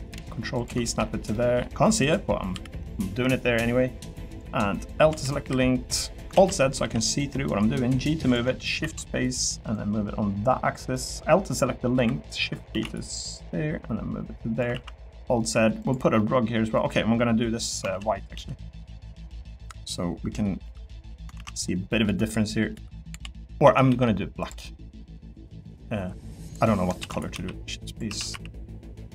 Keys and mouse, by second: 0.5 ctrl+click, 0.8 middle click, 1.3 middle click, 2.5 l, 4.9 l, 5.4 KP_7, 6.3 alt+z, 6.8 g, 8.8 shift+d, 12.7 shift+d, 14.7 alt+z, 14.9 middle click, 15.5 3, 16.2 middle click, 17.9 ctrl+z, 19.3 click, 20.6 l, 21.3 ctrl+z, 22.0-23.9 typing, 24.4 click, 24.6 middle click, 26.5 click, 27.0 shift+d, 27.3 s, 28.1 s, 28.3 y.